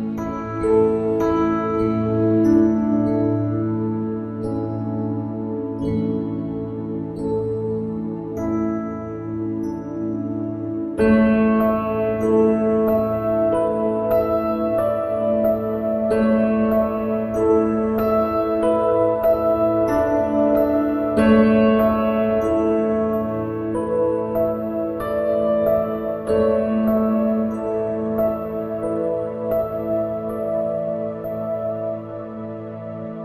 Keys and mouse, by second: 4.1 click.